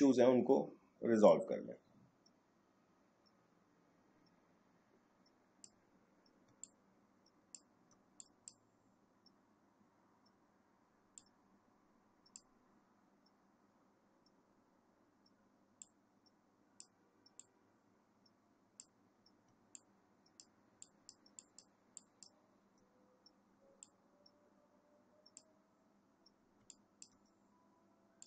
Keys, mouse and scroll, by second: 6.4 space, 6.6 click, 6.9 space, 8.2 click, 11.2-14.8 drag, 15.8-19.5 drag, 19.5 space, 19.7 click, 20.0 space, 20.8 click, 20.9 space, 22.0 click, 22.1 space, 23.8-26.6 drag, 26.6 space, 26.7-28.2 drag.